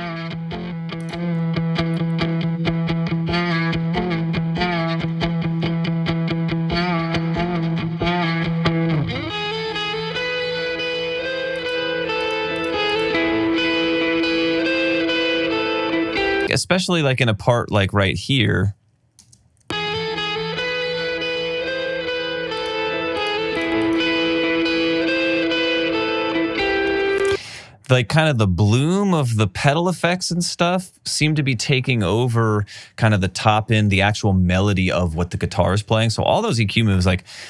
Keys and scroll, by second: 19.7 space, 27.4 space.